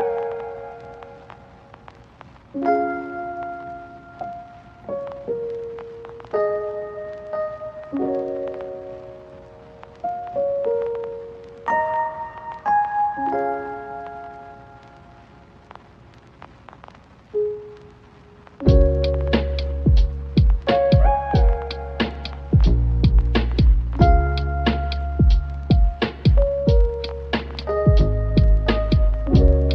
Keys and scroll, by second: 21.4 Tab, 23.2 Tab, 24.1 Tab, 24.2 Tab, 25.0 Tab.